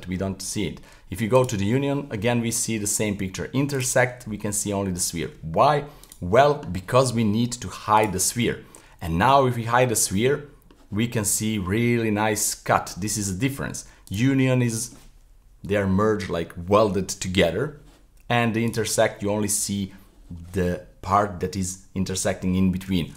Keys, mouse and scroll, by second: 1.3 click, 3.7 click, 6.0 click, 7.9 click, 8.5-14.1 middle drag, 14.1 click, 14.5-17.6 middle drag, 18.7 click.